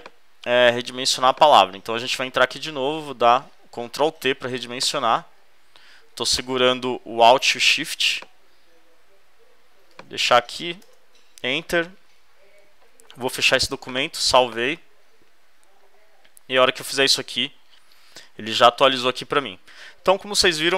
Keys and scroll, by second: 2.9 super+t, 10.8 shift+Return, 11.7 super+Return, 12.8 super+w.